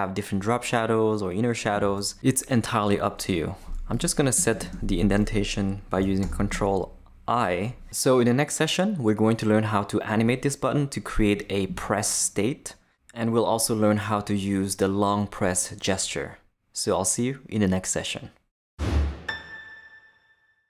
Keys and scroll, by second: 6.2 ctrl+|.